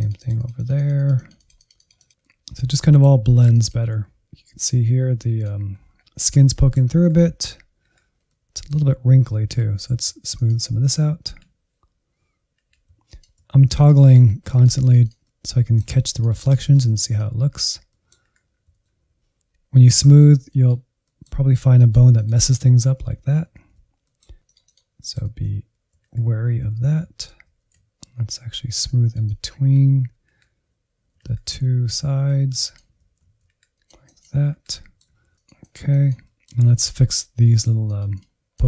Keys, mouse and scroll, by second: 0.0 middle click, 0.6 Right, 0.7 Right, 0.8 Left, 1.5-5.1 drag, 5.3-5.8 scroll up 2, 5.8 middle click, 6.1 Insert, 6.3-6.7 scroll down 1, 6.7 Insert, 7.0 middle click, 7.8 Insert, 8.7 ctrl+click, 9.0 Insert, 10.1 Left, 10.1-11.4 drag, 10.3 Left, 10.5 Left, 10.6 Left, 10.8 Left, 11.0 Left, 11.2 Left, 11.4 Insert, 12.2 ctrl+click, 12.4 Insert, 12.7 click, 13.5 Insert, 14.3 click, 14.6 Insert, 14.9 click, 15.3 middle click, 16.0-17.2 drag, 17.2 middle click, 17.4 Insert, 18.0 ctrl+click, 18.2 Insert, 18.5-19.8 middle drag, 19.8 click, 20.2 middle click, 20.7-21.7 drag, 21.7 ctrl+z, 21.9 ctrl+z, 22.1 ctrl+z, 22.2 middle click, 22.5-23.6 drag, 23.6 middle click, 23.9 alt+z, 24.3 Insert, 24.8 alt+z, 25.3 ctrl+click, 25.5 alt+z, 25.7 Insert, 26.0 middle click, 26.4 click, 27.3 middle click, 27.6 Insert, 28.1 click, 28.7 Insert, 29.0 Insert, 29.5 Insert, 29.7 alt+z, 29.9 Insert, 30.3 ctrl+click, 30.5 alt+z, 30.6 Insert, 30.9-31.9 drag, 31.9 Insert, 32.0 middle click, 32.2 alt+z, 32.7 ctrl+click, 32.9 alt+z, 33.0 Insert, 33.2 scroll up 1, 33.5 click, 34.1 middle click, 34.7-36.1 drag, 36.1-37.8 middle drag, 37.8-38.6 drag.